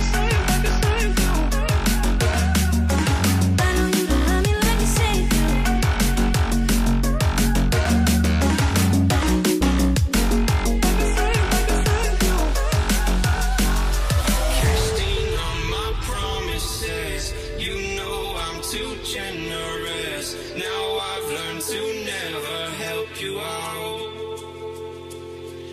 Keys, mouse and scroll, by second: 0.0 alt+click, 1.3 ctrl+ظ, 2.6-4.9 scroll down 1, 5.6 scroll, 8.6 shift+Up, 9.1 shift+Up, 10.4 Right, 10.6 Right, 11.2 Right, 11.4 Right, 13.5 double click, 14.3 typing, 15.1 Tab, 15.5-16.8 typing, 17.9 double click, 18.6-21.0 typing, 19.1 Tab, 20.2 Return.